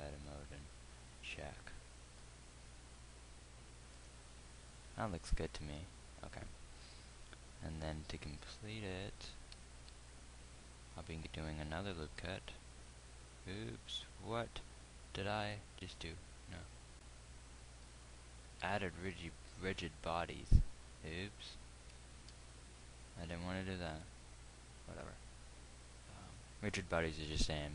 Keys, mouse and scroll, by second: 0.0 Tab, 7.8 KP_1, 10.4 z, 12.6 ctrl+r, 19.0 ctrl+z, 21.0 Tab, 22.6 ctrl+r.